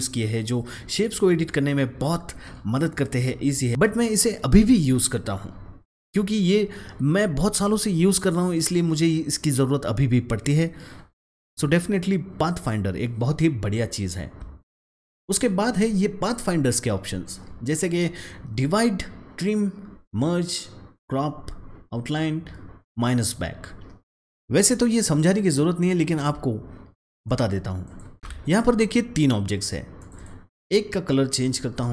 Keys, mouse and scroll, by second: 24.3 click, 27.2 click, 28.2 ctrl+shift+z, 28.4 click, 30.1 double click, 31.2 click.